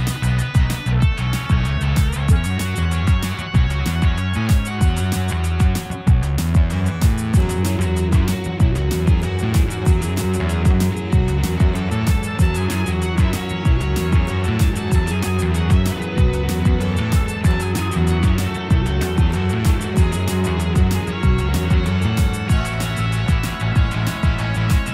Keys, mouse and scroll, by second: 0.5 l, 0.7 p, 1.9 click, 2.0 g, 2.8 Tab, 2.9 click, 3.1 g, 3.8 Tab, 4.2 click, 4.6 l, 4.8 p, 5.3 Tab, 5.4 click, 5.7 g, 9.8-11.0 shift+middle drag, 11.0 o, 11.2 click, 11.3 o, 12.4 click, 12.6 o, 13.0 click, 13.1 o, 13.6 click, 13.7 o, 14.3 click, 14.4 o, 15.1 click, 15.8 Tab, 16.9 shift+middle drag, 17.1-17.5 scroll up 4, 17.5 shift+middle drag, 17.8-19.0 scroll up 2, 19.5 k.